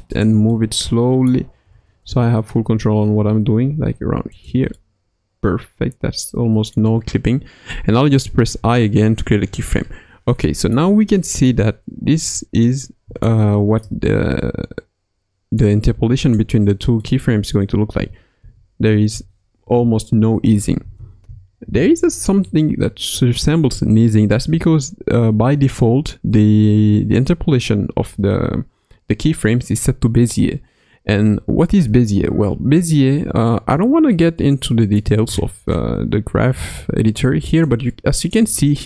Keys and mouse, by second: 0.5-1.3 middle drag, 1.6 g, 4.8-6.8 middle drag, 8.6 i, 9.4 KP_1, 10.4-10.8 shift+middle drag, 11.2-11.6 middle drag, 12.2 click, 13.2-13.8 shift+middle drag, 15.6 click, 17.0 middle click, 17.9 space, 19.1 shift+space, 19.6 shift+Left, 20.4 space, 21.2 space, 21.6 shift+Left, 26.7 t, 32.6 ctrl+Tab, 37.6-38.8 drag.